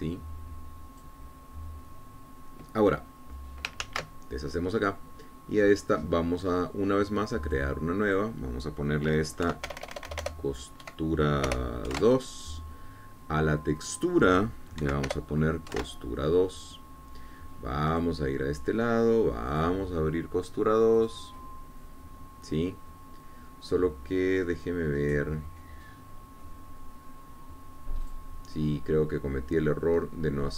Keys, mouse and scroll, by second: 7.2-8.0 scroll up 4, 8.8 click, 9.3 click, 10.7 End, 11.0 BackSpace, 12.1 KP_5, 12.8 BackSpace, 13.2 KP_2, 13.3 KP_Enter, 15.1 click, 16.1 Right, 16.4 BackSpace, 17.0 KP_2, 17.1 KP_Enter, 19.2 click, 20.8 click, 22.2 click, 26.4-26.8 scroll down 1, 29.3 click.